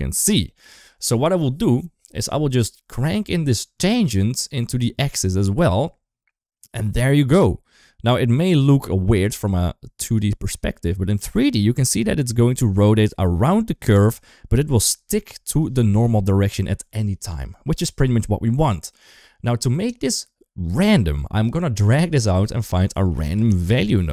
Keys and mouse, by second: 2.0 middle click, 2.6 middle click, 3.6 click, 3.9-5.2 drag, 6.7-10.0 drag, 8.2 typing, 10.3-10.9 middle drag, 11.7-14.0 drag, 14.9 KP_1, 16.0 shift+middle drag, 16.6 shift+middle drag, 21.3-24.1 drag.